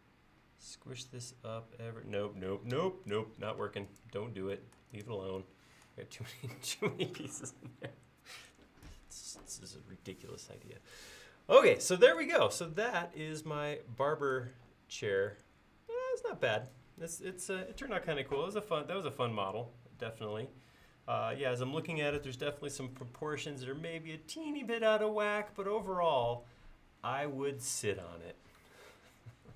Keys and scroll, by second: 2.8 Escape.